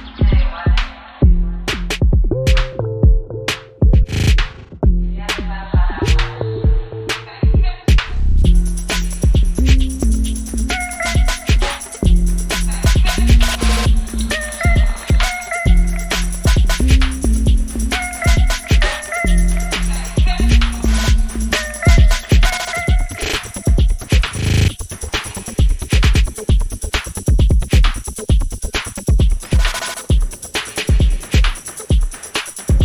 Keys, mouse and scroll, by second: 4.6 click, 5.3 c, 5.8-10.8 drag, 11.9-25.2 drag, 25.2-30.2 drag, 31.4-32.8 drag.